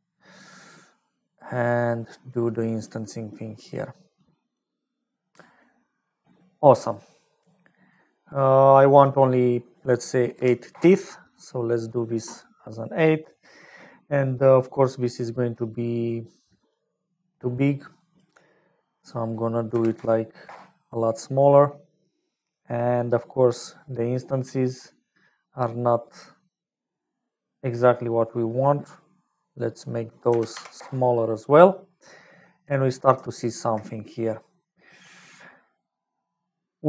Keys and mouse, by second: 0.1 middle click, 1.7-3.9 drag, 4.1 click, 4.9 middle click, 9.1-11.7 drag, 15.4 middle click, 16.3 click, 17.1 middle click, 17.9 click, 18.9-21.8 middle drag, 29.2-31.5 drag, 32.1 middle click.